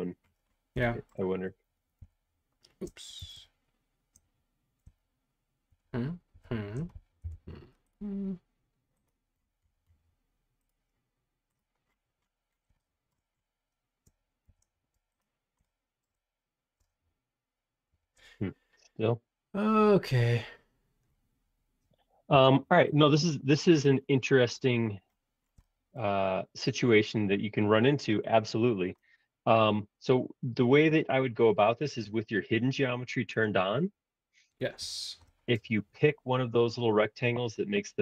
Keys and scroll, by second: 2.0 shift+h, 3.2 super+z, 5.7 shift+h, 6.3 shift+g, 7.2 l, 14.4 shift+g, 15.0 space, 17.9 shift+g, 22.4 l, 24.2 space, 26.9 shift+g, 34.8 shift+g.